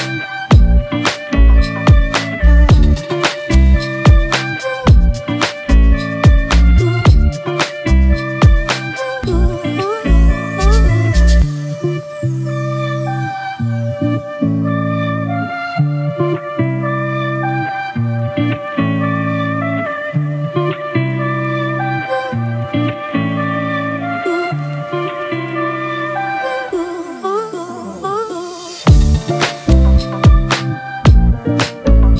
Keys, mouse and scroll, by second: 1.7 double click, 29.8 e.